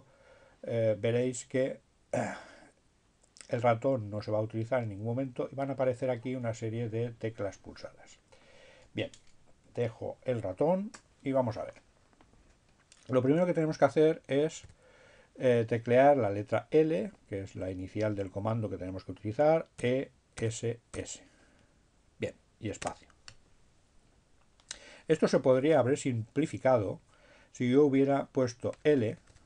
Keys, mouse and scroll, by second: 12.8 l, 17.3 e, 20.5 s, 21.4 space, 25.8 BackSpace.